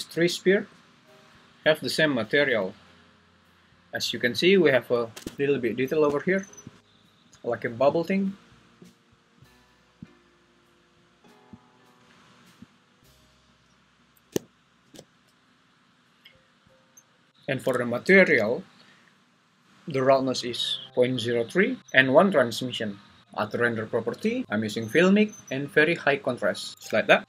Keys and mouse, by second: 0.6 g, 2.5 Escape, 11.6 click, 25.5-27.2 drag.